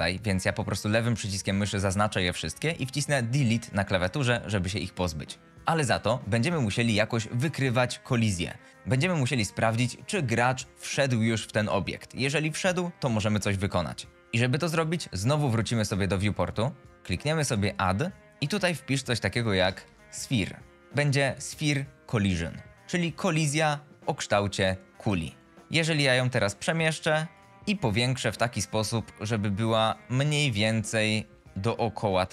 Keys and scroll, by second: 3.5 Delete, 19.4-20.6 typing, 25.5 w, 30.7 d, 31.3 e, 31.6 w.